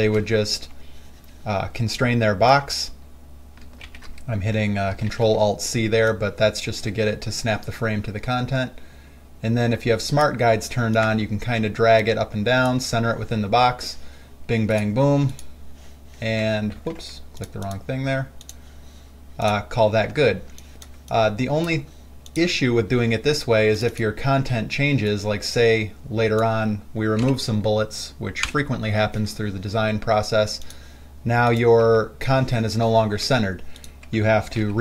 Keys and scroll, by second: 0.3 ctrl+alt+c, 4.1 ctrl+alt+c, 5.4 ctrl+alt+c, 17.0 ctrl+z, 20.4 space, 27.5 Delete, 32.1 w, 33.4 w.